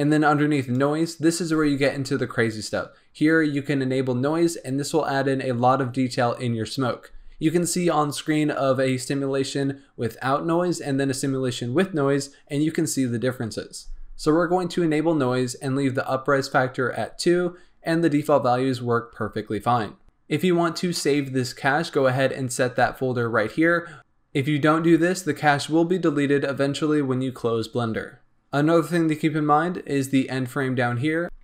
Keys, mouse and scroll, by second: 1.1-1.6 drag, 1.6-3.0 scroll down 4, 31.2 click.